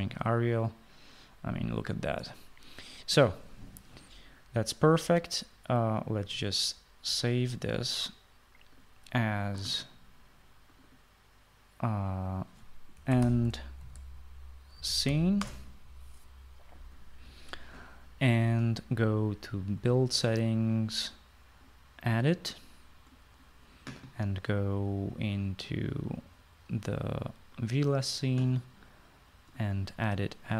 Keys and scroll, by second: 13.7-16.6 typing.